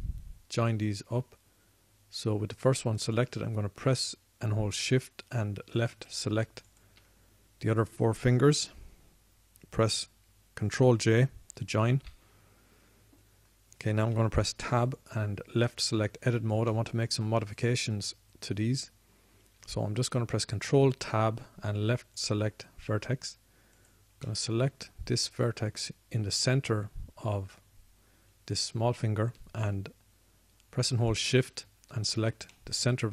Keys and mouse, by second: 4.5 drag, 9.8 middle click, 13.4 ctrl+j, 15.5 Tab, 18.0-21.5 middle drag, 21.5 ctrl+Tab, 23.7 ctrl+Tab, 25.1-26.3 drag, 26.8-30.0 middle drag.